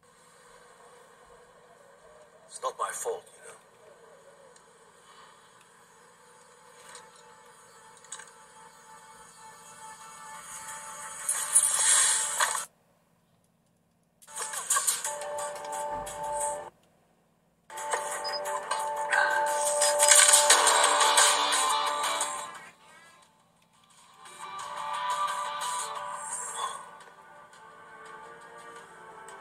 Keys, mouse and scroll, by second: 7.3 super+1, 8.2 super+2, 12.5 space, 14.2 space, 29.3-29.4 drag.